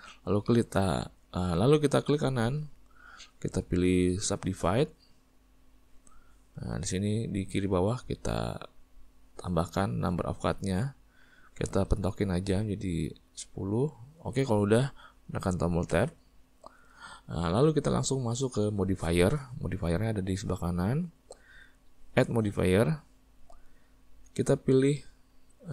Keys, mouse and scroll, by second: 5.5 right click, 11.4-16.0 drag, 16.0 Tab.